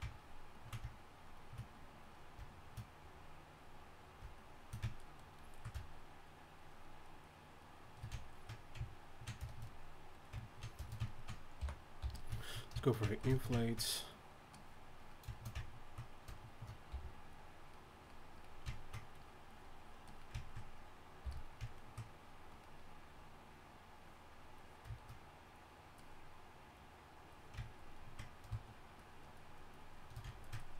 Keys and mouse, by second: 11.6 i, 12.0 f, 16.9 f, 18.7 drag, 21.2 f.